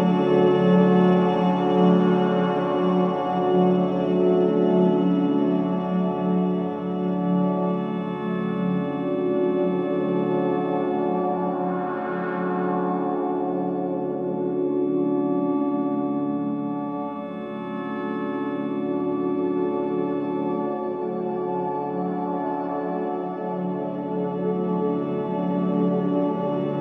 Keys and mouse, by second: 0.9 Tab, 1.2-4.5 alt+drag, 5.0 Tab, 5.5-7.1 ctrl+alt+drag, 7.9 g, 9.6-11.6 alt+drag, 11.9 Tab, 12.4 ctrl+alt+click, 16.4 ctrl+a, 17.3 click, 18.0 Tab, 19.1 ctrl+a, 20.0 ctrl+z, 20.3 ctrl+z, 21.3 ctrl+z, 21.7 ctrl+z, 22.2 ctrl+z, 23.1 ctrl+z, 23.8 ctrl+z.